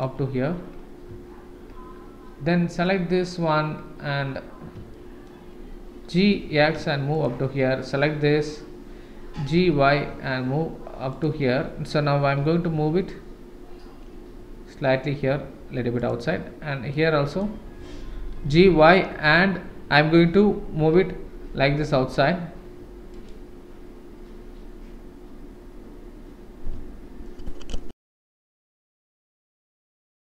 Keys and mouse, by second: 2.8 click, 4.9 shift+middle click, 6.2 g, 7.8 click, 9.3 g, 17.0 click, 18.3 g.